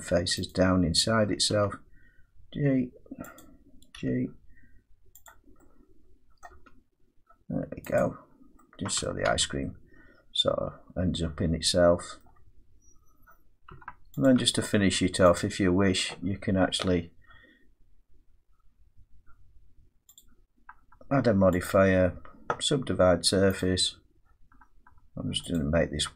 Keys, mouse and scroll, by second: 0.5 click, 1.5 g, 3.4 click, 4.0 g, 5.3 click, 6.5 middle click, 6.6 g, 8.0 click, 9.1 middle click, 9.3 Tab, 12.2 middle click, 13.1-13.7 scroll down 3, 13.7 Tab, 14.3 click, 14.4 Tab, 15.4 click, 20.2 click, 21.7 click, 23.6 click.